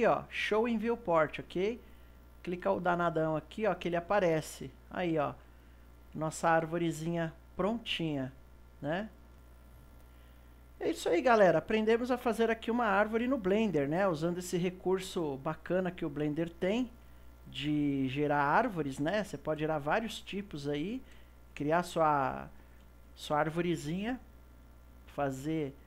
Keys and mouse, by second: 2.0 click, 5.7-8.7 shift+middle drag, 11.1 click, 12.3 click, 13.2 KP_0, 15.0 click, 16.1 click, 17.0 KP_Decimal, 18.0-24.5 middle drag, 24.5 click.